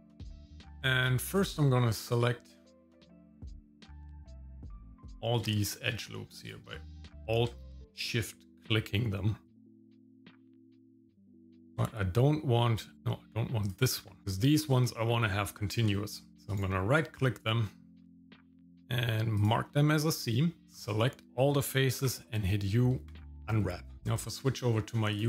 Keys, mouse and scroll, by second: 0.2 shift+middle click, 1.3 alt+click, 3.0 middle click, 3.4 scroll up 2, 4.3 alt+shift+click, 5.1 middle click, 5.6 shift+middle click, 6.4 alt+shift+click, 7.6 shift+middle click, 8.2 middle click, 9.6 shift+middle click, 9.9 alt+shift+click, 10.1 shift+middle click, 10.4 middle click, 10.6 alt+shift+click, 10.8 shift+middle click, 11.3 middle click, 11.4 middle click, 12.8 alt+shift+click, 13.6 alt+shift+click, 14.2 shift+middle click, 16.0 shift+middle click, 16.5-19.5 right drag, 20.6 Tab, 20.6 click, 20.6 shift+middle click, 20.7 a, 22.0 u, 24.0 shift+middle click.